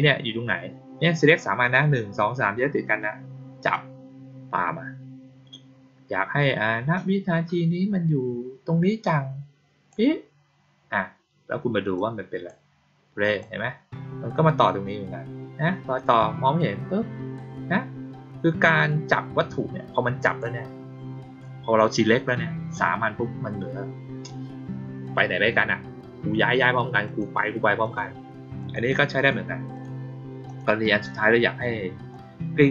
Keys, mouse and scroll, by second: 3.6-9.8 drag, 11.9-12.4 drag, 13.2 click, 20.2 click, 27.0 click, 27.7 click, 28.5 click, 29.1 click, 29.7 click, 30.4 click, 32.1-32.7 drag.